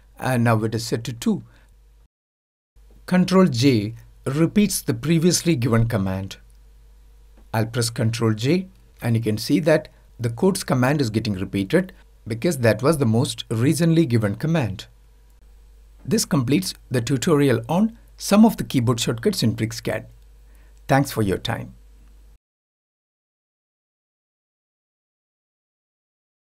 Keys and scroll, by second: 3.3 ctrl+j.